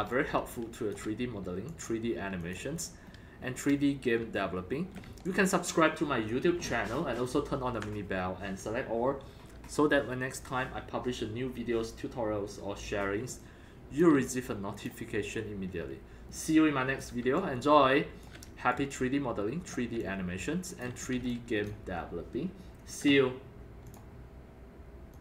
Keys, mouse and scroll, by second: 0.0-1.4 typing, 0.1-0.9 drag, 1.7 click, 2.4 click, 3.0 scroll up 3, 3.4 scroll down 1, 4.2 scroll, 4.4 alt+middle click, 5.3-6.3 alt+drag, 13.4-14.8 alt+drag, 15.5-15.8 scroll down 2, 16.3 alt+middle click, 17.4 alt+click, 18.7-19.5 alt+right drag, 20.0 alt+click, 21.1 alt+click, 21.2 c, 21.3-21.7 drag, 21.7 drag, 22.1 scroll up 1, 22.2-22.6 drag, 23.9 click, 25.1 click.